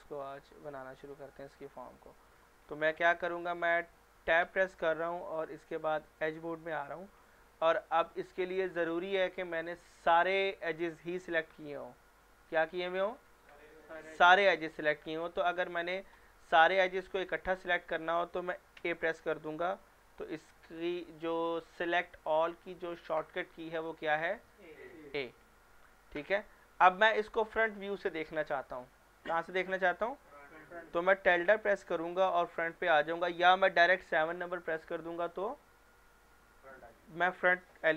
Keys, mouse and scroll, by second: 0.2-0.6 scroll up 1, 0.6-1.2 middle click, 1.6-2.2 scroll down 1, 2.2 middle click, 2.6 scroll down 1, 3.0 middle click, 4.4 Tab, 6.2 click, 18.8 a, 32.6 click.